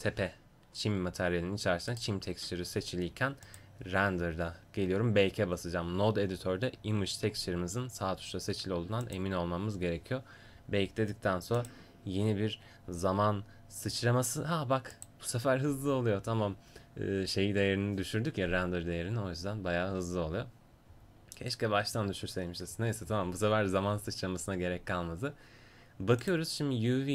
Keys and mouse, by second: 3.5-9.0 right drag.